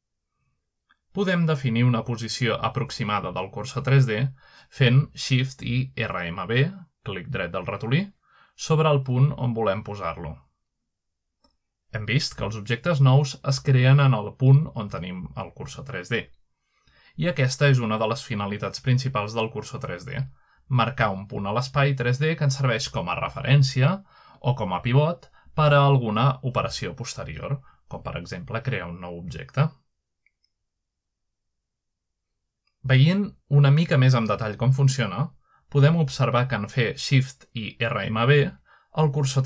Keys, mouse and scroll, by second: 0.0-0.3 scroll up 2, 0.3-1.4 scroll down 2, 5.6-6.2 shift+right drag, 7.5-8.2 shift+middle drag, 7.8-10.2 shift+right drag, 10.4 shift+right click, 10.8 shift+right click, 11.1 shift+right drag, 11.5 shift+right click, 11.8-15.4 shift+right drag, 15.4-16.2 shift+middle drag, 17.4 middle click, 17.9-18.7 shift+middle drag, 19.0 middle click, 20.4-25.2 shift+right drag, 28.0-28.8 middle drag, 28.4-30.2 shift+right drag, 30.6-31.0 right drag, 31.1-32.2 shift+middle drag, 31.4 shift+right click, 32.5-33.1 shift+middle drag, 33.9 shift+middle click, 34.2 shift+right click, 35.3-35.7 shift+right drag, 37.7 middle drag, 38.1 shift+middle click, 38.7-39.4 shift+middle drag, 39.2-39.4 shift+right drag.